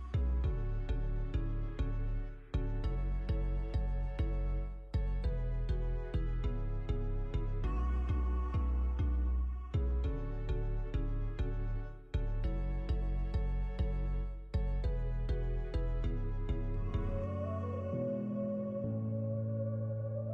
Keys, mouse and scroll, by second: 0.7 Tab, 0.8 click, 0.9 middle click, 0.9 scroll up 1, 1.0 scroll down 6, 1.2 KP_1, 1.4-1.8 scroll up 7, 3.1 ctrl+s, 3.3 scroll down 2, 3.6 ctrl+s.